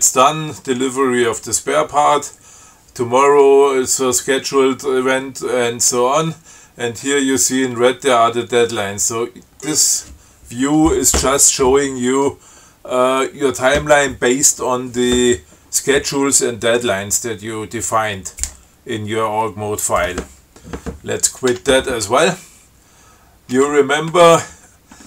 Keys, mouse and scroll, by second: 5.8 scroll down 2, 8.8 scroll down 2, 9.3 scroll up 2, 9.8 scroll up 2, 21.8 q.